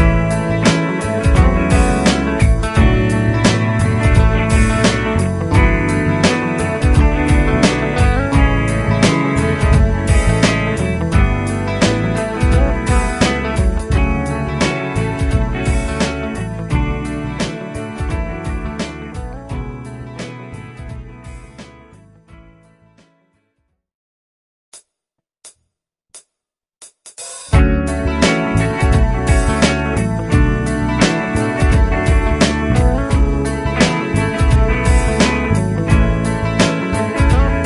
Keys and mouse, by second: 0.0 F3, 3.8 F3, 4.4 F3, 6.3 F2, 10.4 double click, 35.6 double click.